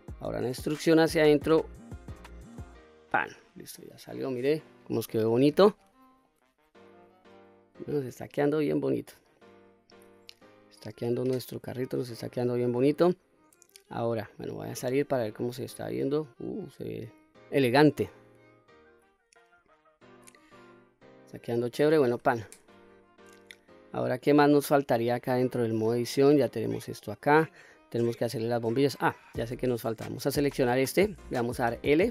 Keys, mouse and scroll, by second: 0.6 e, 2.9 click, 3.4-3.8 scroll down 1, 3.8-4.7 middle drag, 4.9-5.3 middle drag, 5.8-6.2 scroll down 1, 6.2-6.8 middle drag, 7.2-9.4 middle drag, 9.9 middle click, 10.8-12.0 middle drag, 12.4-14.3 middle drag, 14.8 Tab, 15.4-17.1 middle drag, 17.2-18.0 scroll down 2, 18.0-20.0 middle drag, 20.3-20.8 scroll up 1, 20.8-21.4 middle drag, 22.1 Tab, 22.9-23.6 scroll down 1, 23.6-24.9 scroll up 2, 24.0-27.4 middle drag, 30.4 click, 31.7 l.